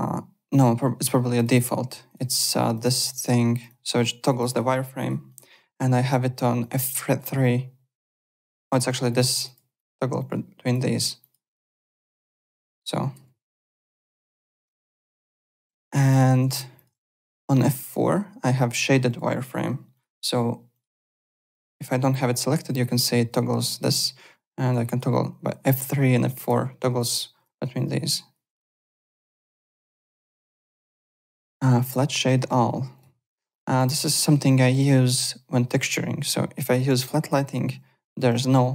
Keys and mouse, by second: 1.3 click, 2.0 click, 2.6 click, 5.7 F3, 6.6 click, 6.9 F3, 8.0 click, 8.7 click, 11.2 click, 11.9 click, 12.4 F3, 14.6 F4, 15.6 alt+Tab, 16.1 alt+click, 16.4 alt+Tab, 16.7 alt+click, 18.3 alt+Tab, 18.7 alt+click, 19.9 click, 20.7 click, 22.3 F4, 24.1 F3, 24.5 F4, 24.9 F3, 25.1 F4, 25.3 F3, 26.4 F4, 28.3 F3, 28.8 F4, 29.5 alt+Tab, 30.1 alt+click, 32.9 click, 34.7 click, 36.7 click, 37.3 click, 38.5 alt+click.